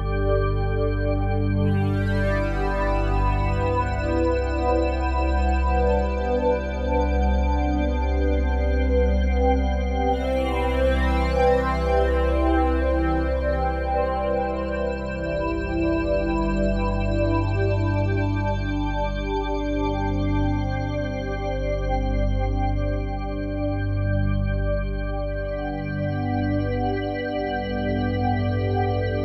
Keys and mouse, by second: 0.0 click, 0.9 Delete, 1.6 click, 2.2 click, 3.0 Delete, 3.3 click, 4.4-5.7 alt+drag, 5.9 click, 6.7 3, 7.7 g, 8.5-10.2 drag, 10.2 g, 10.8-13.8 drag, 13.8 3, 14.3 g, 15.1-17.4 drag, 17.0 Tab, 17.5-21.2 ctrl+alt+drag, 21.2 ctrl+s, 21.7-24.4 alt+drag, 24.4 ⇆, 25.1 ⇆, 26.2-29.2 ctrl+alt+drag.